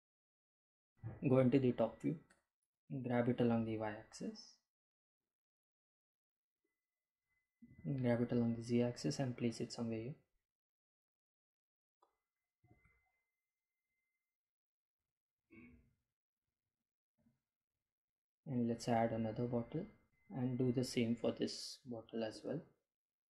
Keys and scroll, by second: 2.5 g, 2.8 x, 3.8 y, 6.5 Delete, 7.6 g, 8.3 x, 12.2 g, 13.4 z.